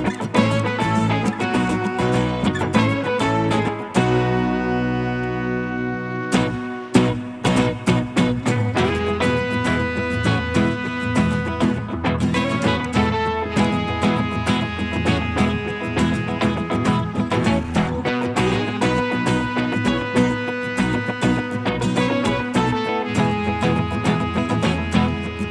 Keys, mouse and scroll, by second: 4.6 middle click, 6.4 scroll up 1, 7.0 scroll down 1, 7.0 middle click, 9.6-10.0 scroll up 1, 10.5 scroll down 1, 11.2 scroll up 1, 14.3 middle click, 16.1-16.6 scroll up 1, 16.8 scroll down 1, 16.9 middle click, 18.1 scroll up 1.